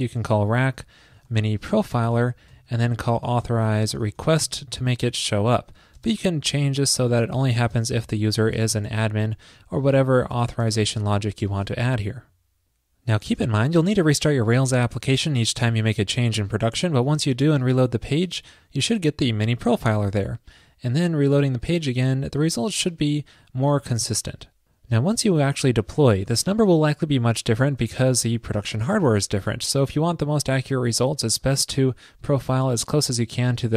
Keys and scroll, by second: 9.4 alt+Left, 9.4 alt+Left, 11.7 super+s.